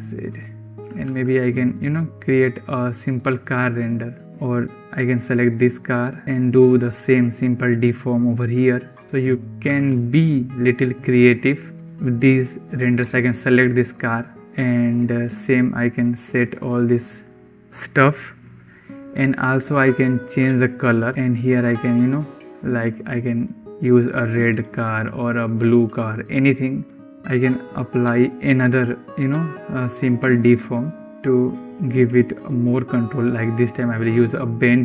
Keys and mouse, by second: 0.7 r, 4.2 ctrl+z, 5.0 click, 6.2-9.0 drag, 9.0 g, 9.5 r, 12.7 click, 15.5 click, 15.8 click, 16.3 click, 20.4 click, 27.5-31.1 drag, 31.4-32.3 drag, 33.3 click.